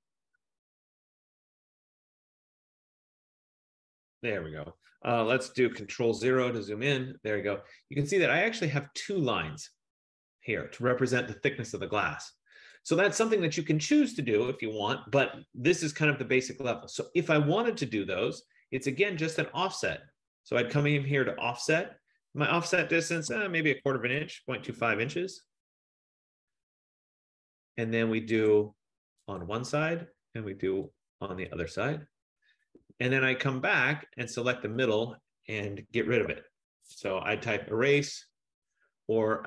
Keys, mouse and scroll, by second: 5.9 click, 6.1 ctrl+0, 13.2 click, 14.3 click, 17.6 scroll, 21.3 click, 23.6-25.3 typing, 28.5 click, 29.5 click, 30.9 click, 31.0 F15, 31.8 click, 32.8 Return, 34.6 click, 35.9-37.1 typing, 39.1 Down.